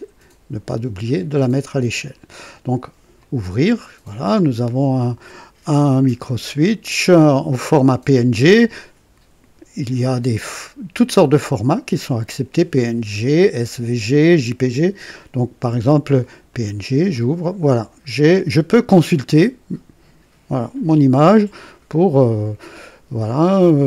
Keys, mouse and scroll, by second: 3.1 click, 16.4 click.